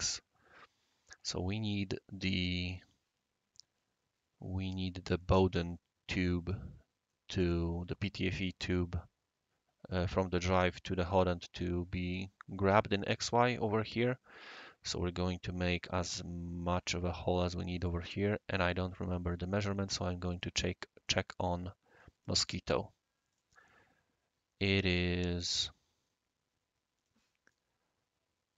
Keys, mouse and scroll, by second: 7.1-8.3 middle drag, 15.5 scroll up 1, 15.6-16.0 scroll down 2, 16.0-16.4 scroll up 2, 16.4 scroll down 1, 17.8 click, 20.3 click, 21.0-22.0 right drag, 23.3 click, 25.4 click, 27.0-27.5 drag.